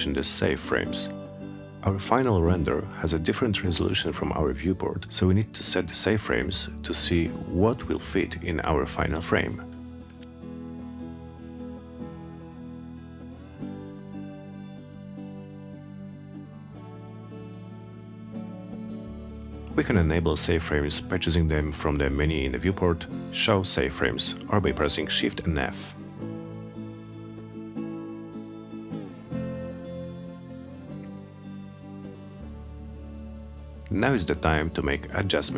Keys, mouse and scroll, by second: 2.8 click, 4.4 click, 7.0 click, 15.7 click, 26.9 click, 31.3-33.0 drag.